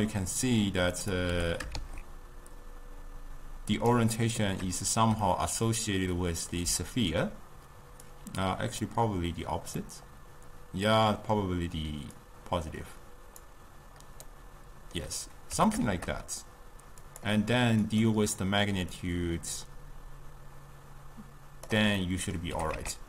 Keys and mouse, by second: 1.4 g, 4.2-8.2 middle drag, 8.2 click, 9.9-12.3 middle drag, 12.3-14.4 drag, 14.4-15.6 middle drag, 15.6 g, 18.0 click, 19.0-22.1 drag, 22.1-22.6 middle drag, 22.6 g.